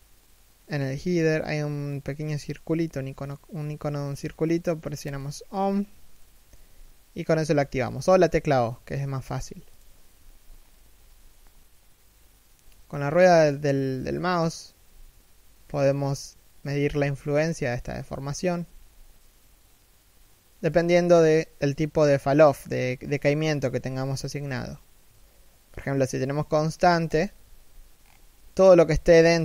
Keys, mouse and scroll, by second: 6.1 g, 27.0 g.